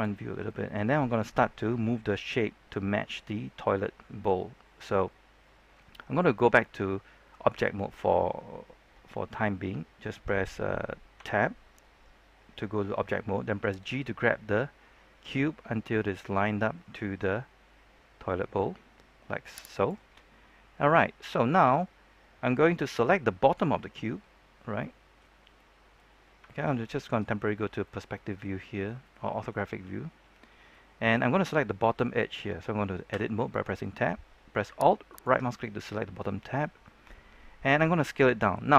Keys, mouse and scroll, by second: 0.2 scroll down 1, 0.4 shift+middle click, 11.1 Tab, 13.7 g, 19.7 click, 23.0-24.3 scroll up 1, 24.3-24.7 scroll down 1, 24.7 middle click, 25.3 scroll up 1, 25.5 middle click, 26.4 shift+middle click, 27.5-27.8 scroll up 1, 27.8 middle click, 29.2-30.6 scroll down 1, 30.6 middle click, 33.0 Tab, 35.0 alt+right click, 37.0-38.6 middle drag.